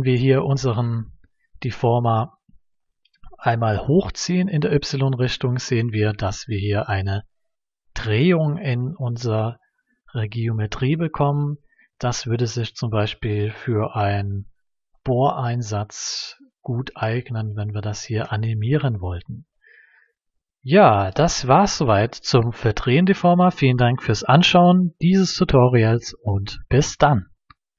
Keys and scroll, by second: 1.0 y.